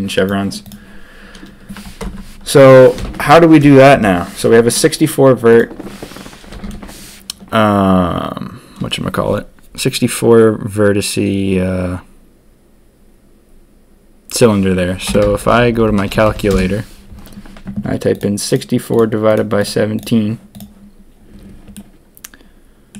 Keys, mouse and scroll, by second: 2.0 ctrl+KP_3, 2.9 ctrl+KP_1, 3.9 KP_1, 21.7-22.9 drag.